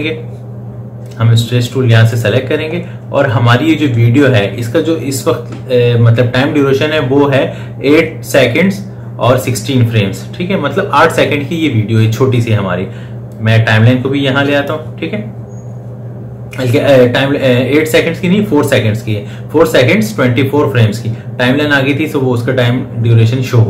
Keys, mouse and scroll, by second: 13.1-18.8 drag.